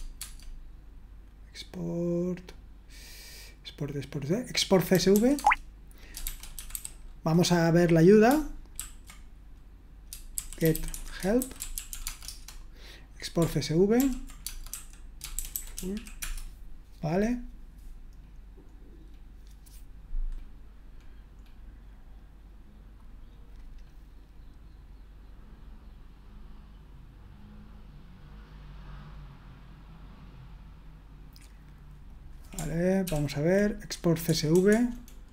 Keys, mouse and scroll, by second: 0.2 Tab, 4.7-7.2 typing, 8.8 ctrl+a, 10.1-12.4 typing, 14.0 ctrl+p, 14.4-16.4 typing, 23.8-24.7 scroll up 1, 24.7-25.5 scroll up 1, 25.5-26.3 scroll up 1, 26.3-32.1 scroll up 1, 32.1-33.1 scroll up 1, 33.1 ctrl+p, 34.3-35.3 typing.